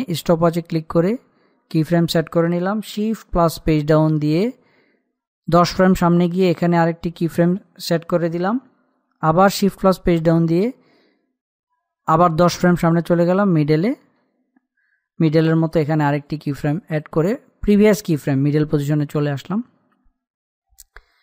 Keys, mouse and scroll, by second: 0.7 click, 4.1 shift+Page_Down, 7.2 click, 10.2 shift+Page_Down, 14.2 click, 18.3 click.